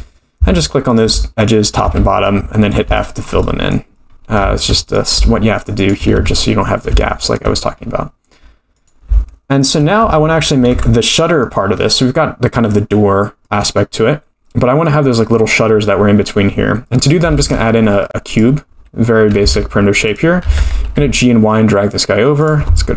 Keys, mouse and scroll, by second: 0.9 click, 1.4 shift+click, 1.8 f, 2.2 middle click, 2.9 shift+middle click, 3.4 middle click, 4.1-4.4 scroll up 3, 4.8 click, 5.8 shift+click, 6.1 f, 6.4 middle click, 7.0 shift+middle click, 7.8-8.5 scroll up 3, 8.5 scroll up 1, 8.7 click, 9.6 shift+click, 10.0 f, 10.2-11.0 scroll down 6, 10.7 Tab, 11.0-11.5 middle drag, 11.6-12.4 scroll down 3, 12.7-13.4 middle drag, 13.4-13.8 scroll up 1, 13.9-14.4 scroll down 2, 16.8-17.2 scroll down 3, 17.4 shift+a, 19.4 g, 20.4 g.